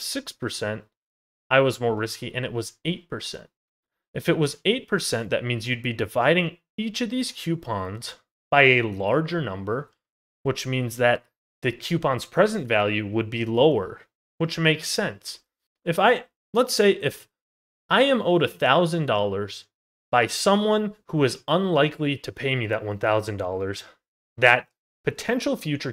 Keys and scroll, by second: 3.0 ctrl+z, 9.4 ctrl+z.